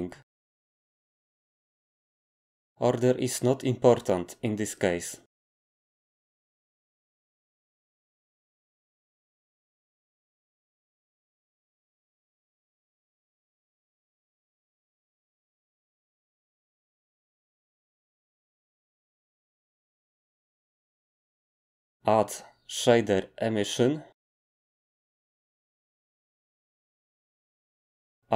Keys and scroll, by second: 2.3 d, 19.9 g, 22.5 a.